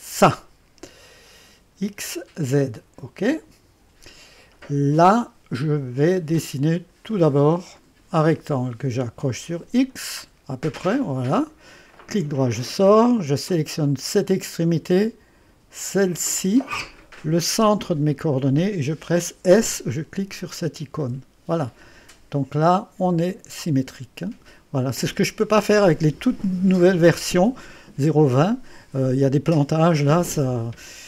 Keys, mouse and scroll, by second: 3.2 click, 7.1 click, 9.6 click, 10.8 click, 12.1 right click, 13.8 click, 16.1 click, 18.1 click, 21.1 s, 23.1-25.7 drag, 26.6-27.4 scroll up 1, 27.4 click, 28.0 right click.